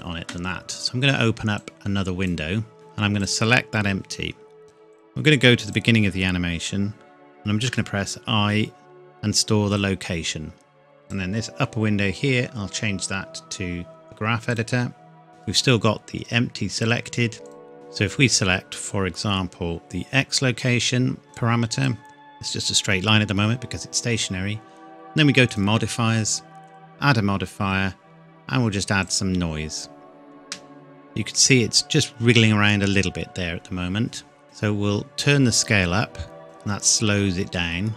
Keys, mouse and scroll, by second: 1.6 click, 9.7 click, 14.5 click, 15.3-16.3 scroll down 1, 16.8 click, 21.3 click, 25.5 click, 29.0 click, 30.4 space, 34.5 click.